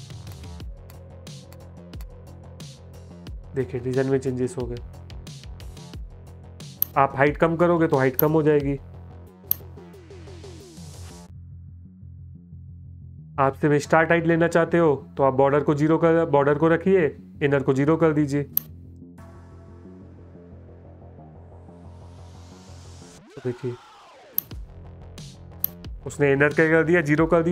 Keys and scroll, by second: 3.8 space, 10.1 BackSpace, 18.8 BackSpace, 19.3 BackSpace, 23.1 space.